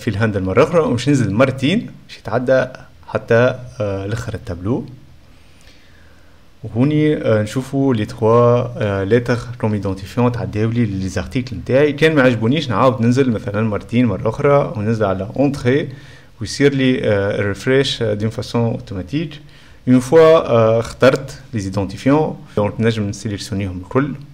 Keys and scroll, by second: 15.0 F12, 15.1 BackSpace, 15.1 ], 15.3 Return, 16.0 ], 18.7 Return, 19.2 Return, 20.0 '.